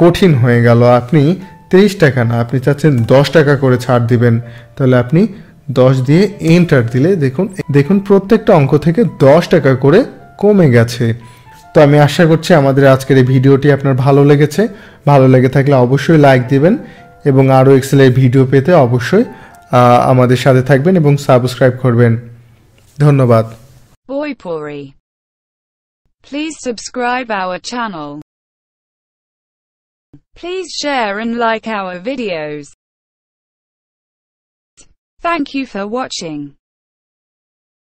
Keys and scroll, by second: 2.4 1, 6.4 Return.